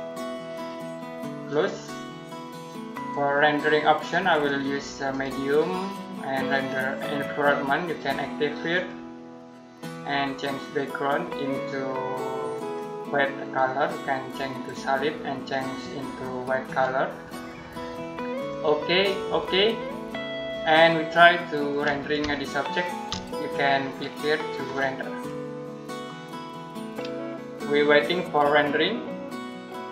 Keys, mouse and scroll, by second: 22.2 shift+middle click, 23.0 middle click, 24.5 click.